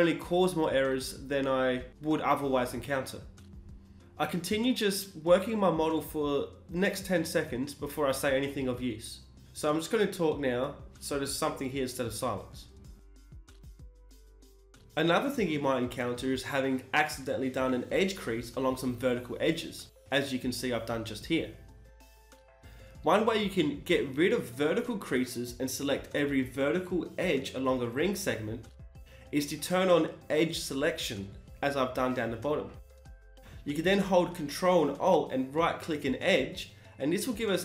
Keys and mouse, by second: 1.7 shift+e, 4.1 middle click, 5.2 KP_1, 8.0 shift+e, 9.7 KP_1, 10.7 click, 11.2 middle click, 13.2-16.8 middle drag, 16.8 right click, 17.9 shift+e, 25.7-27.6 drag, 27.6-30.8 right drag, 30.8 shift+e.